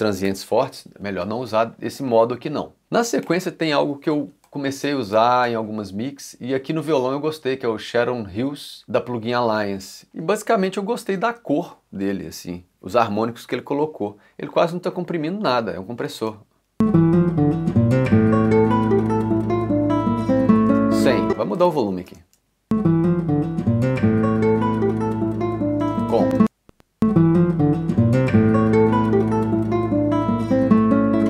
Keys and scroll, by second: 2.9 c, 11.2 ., 16.2 space, 20.7 space, 25.8 space.